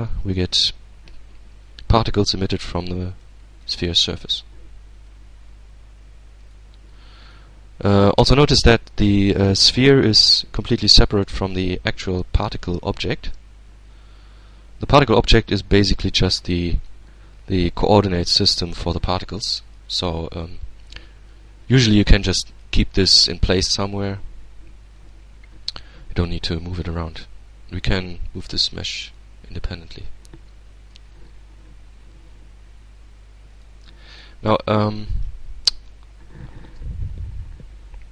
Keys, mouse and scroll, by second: 0.0-3.5 middle drag, 3.5 shift+right click, 4.5 shift+g, 5.9 right click, 6.3-6.8 scroll down 2, 6.8-8.5 middle drag, 8.5-8.9 scroll up 2, 9.9 right click, 12.3 g, 14.4 right click, 15.6-16.7 middle drag, 16.8-17.7 scroll down 2, 17.9-19.4 shift+middle drag, 19.4-20.0 shift+scroll up 2, 20.1-20.6 shift+scroll down 3, 21.1-21.5 scroll down 2, 21.5-22.5 middle drag, 24.4 right click, 26.5 g, 28.5 right click, 29.2-29.6 scroll down 1, 29.8-30.3 scroll up 1, 31.5 alt+a, 32.9 right click, 33.8-35.0 drag, 34.7 Tab, 35.2-36.5 middle drag, 36.5-38.1 drag.